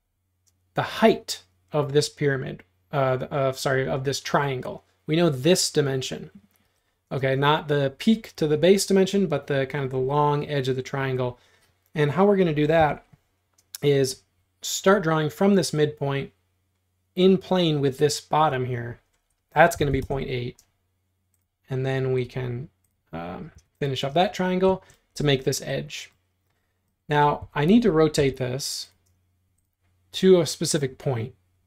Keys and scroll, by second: 6.7 Escape, 7.2 space, 12.8 l, 19.5-20.4 typing, 23.6 e, 24.1 space, 27.5 q, 28.2 Tab.